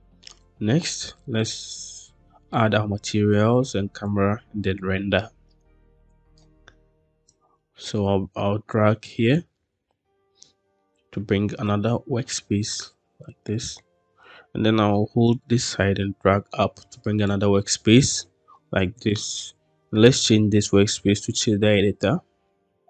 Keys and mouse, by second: 4.1-6.2 drag, 7.3-9.2 drag, 10.4 shift+middle click, 11.7 click, 13.5 shift+middle click, 15.2 click, 15.8-17.2 drag, 19.0-21.1 drag.